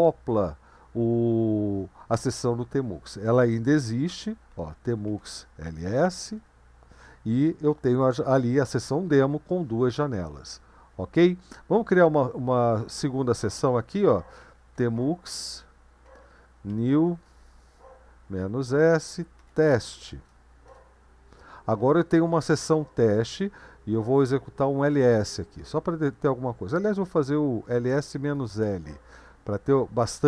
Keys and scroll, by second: 4.3-6.4 typing, 14.2-20.4 typing, 20.7 Return, 24.4-25.1 typing, 25.5 Return, 27.5-29.1 typing.